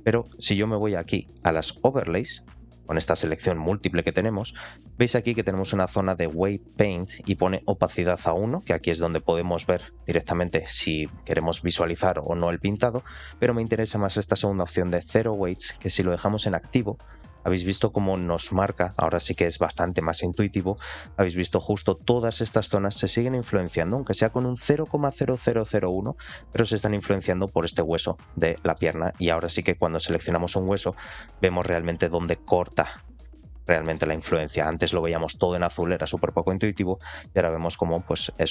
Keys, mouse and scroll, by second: 2.2-17.2 drag, 17.3 scroll down 2, 18.0-18.8 scroll down 4, 18.1 shift+middle click, 18.8 middle click, 19.9 shift+middle click, 20.5 middle click, 20.9 scroll up 2, 21.2 shift+middle click, 21.6-22.6 scroll up 1, 26.6 shift+middle click, 28.1-28.5 scroll down 2, 28.7 shift+middle click, 29.1 shift+middle click, 29.9 ctrl+click, 30.2 shift+middle click, 31.0 ctrl+click, 31.2-32.1 scroll down 2, 33.7 shift+middle click, 34.1 scroll up 2, 35.8 ctrl+click, 36.5 scroll down 3, 36.9 shift+middle click, 38.2 ctrl+click.